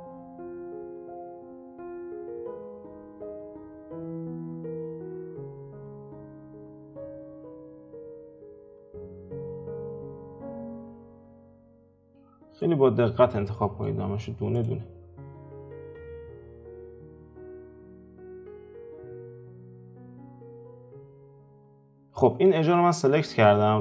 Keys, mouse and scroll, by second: 0.2 alt+shift+click, 0.6 alt+shift+click, 1.2 alt+shift+click, 1.7 alt+shift+click, 2.3 alt+shift+click, 2.7 alt+shift+click, 3.2 ctrl+z, 3.8 alt+shift+click, 4.3 alt+shift+click, 4.6 alt+shift+click, 5.1-6.6 middle drag, 8.4 ctrl+middle click, 9.3 alt+shift+click, 9.7 alt+shift+click, 10.2 alt+shift+click, 10.6 alt+shift+click, 11.2 alt+shift+click, 11.7 alt+shift+click, 12.3 scroll down 2, 12.6-14.5 middle drag, 14.5 alt+shift+click, 15.6 alt+shift+click, 16.2 alt+shift+click, 16.7 alt+shift+click, 17.3 scroll down 1, 17.5-19.1 middle drag, 19.1 alt+shift+click, 19.4 middle click, 19.8 alt+shift+click, 20.4 alt+shift+click, 21.0 alt+shift+click, 21.5-21.8 scroll down 3, 21.8-23.8 middle drag.